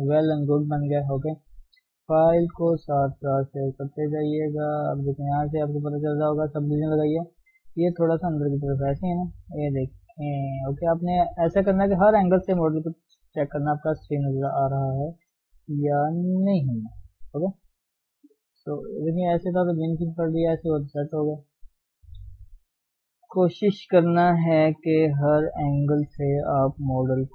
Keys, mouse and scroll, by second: 0.6 shift+middle click, 1.0 scroll down 1, 1.1-2.1 middle drag, 2.1 ctrl+shift+s, 4.0 shift+middle click, 4.2 scroll up 1, 4.4-5.4 middle drag, 5.4 scroll up 1, 5.5-7.0 middle drag, 7.0 scroll up 1, 7.2-8.7 shift+middle drag, 8.7 Tab, 10.3 click, 10.8-12.8 middle drag, 12.8 g, 14.3 click, 14.7 middle click, 15.6 g, 17.0 click, 17.3 g, 19.0 g, 20.4 right click, 21.0 middle click, 21.7-22.1 scroll down 2, 22.1 KP_3, 22.8 shift+middle click, 23.2-23.7 scroll up 2, 23.9 click, 24.6 g, 26.1 click, 27.2 g.